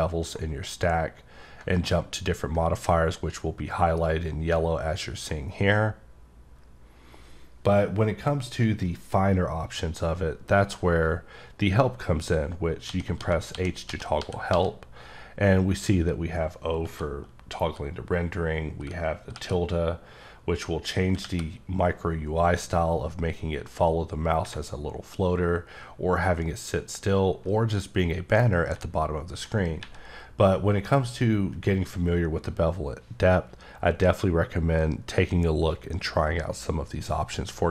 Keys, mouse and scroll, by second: 2.1-2.8 scroll up 1, 4.8-5.5 scroll up 1.